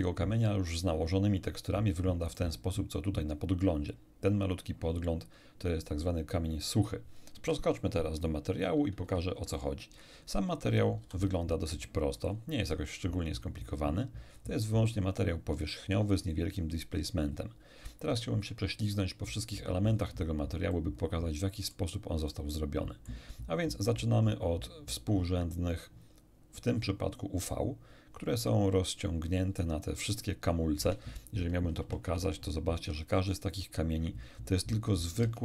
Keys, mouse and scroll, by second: 2.3 right click, 9.0 shift+F3, 9.9 shift+middle click, 9.9-10.2 shift+scroll down 2, 11.0 n, 11.7 middle click, 12.3 scroll up 1, 13.2-13.6 scroll up 1, 14.3-15.1 scroll up 1, 17.8 scroll down 1, 20.7-21.9 middle drag, 22.3-23.3 middle drag, 24.0-25.1 drag, 31.8 shift+F5, 32.7 shift+Tab, 35.2 Tab.